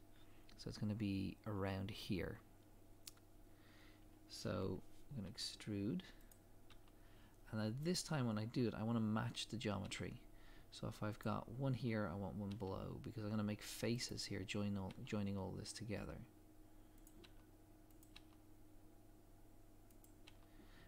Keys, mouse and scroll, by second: 3.7 scroll up 1, 5.2 e, 8.1 scroll down 1, 9.8 e, 14.2 scroll down 1, 14.9 e, 17.0 click, 17.2 e.